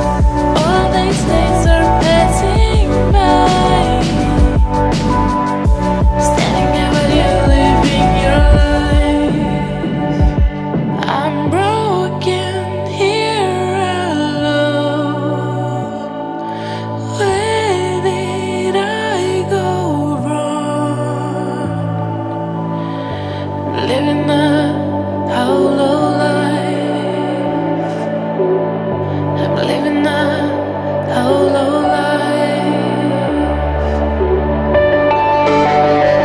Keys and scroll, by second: 2.2 ctrl+t, 19.8 ctrl+j.